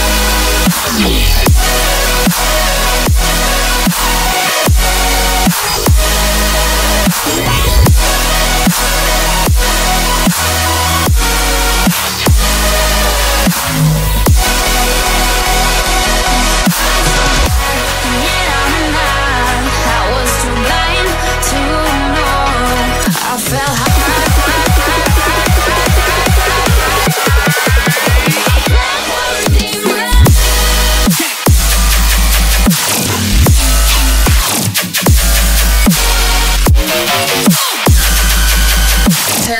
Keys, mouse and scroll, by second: 3.6 middle click, 26.3 ctrl+z, 33.5 scroll up 2, 34.4 middle click.